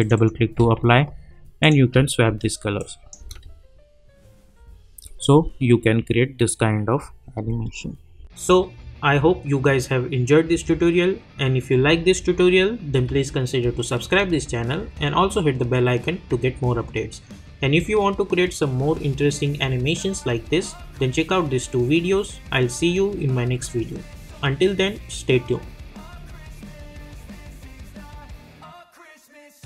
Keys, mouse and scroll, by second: 0.0 click, 3.2 space, 7.4 space.